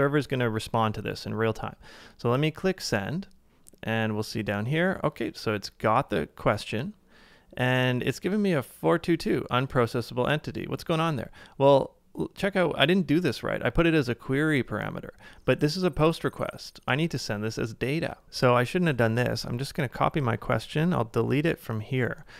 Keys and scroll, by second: 19.0 super+c.